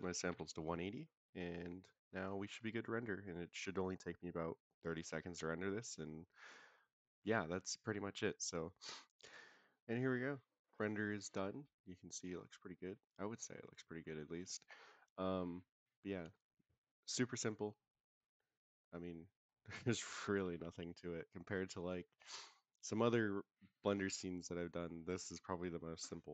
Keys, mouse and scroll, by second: 8.4 click.